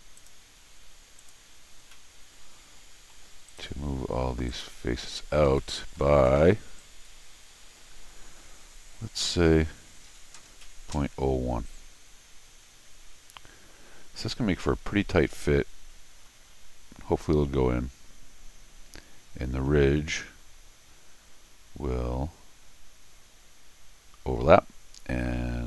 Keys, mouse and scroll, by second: 0.2 click, 1.2 click, 1.9-3.1 middle drag, 3.5 click, 4.5 click, 5.6 middle click, 6.8 click.